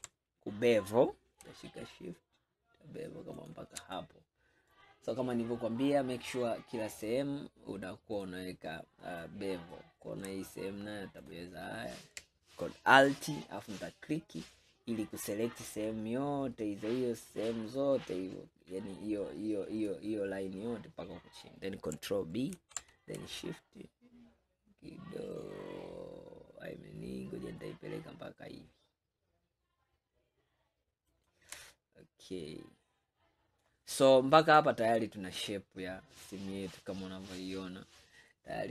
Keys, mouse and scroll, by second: 4.0-7.1 middle drag, 8.2 click, 9.3-11.3 middle drag, 11.3 alt+click, 17.6-20.6 middle drag, 21.3-22.2 scroll down 1, 22.2-22.6 scroll down 1, 22.6 ctrl+b, 31.8-34.5 middle drag, 34.5 click, 35.4-38.5 middle drag.